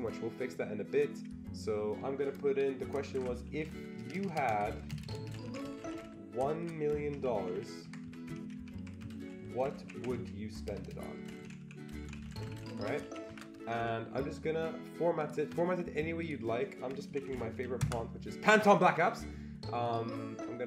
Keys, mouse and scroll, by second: 2.8-13.3 typing, 13.8 Escape, 15.2 click, 16.2 click, 16.8-18.0 typing, 19.8 click.